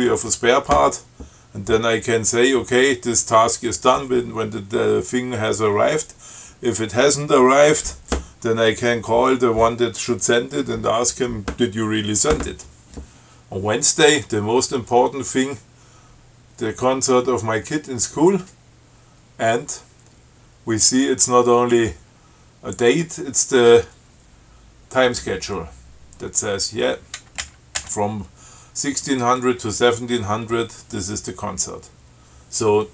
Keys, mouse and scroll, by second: 27.6 Up.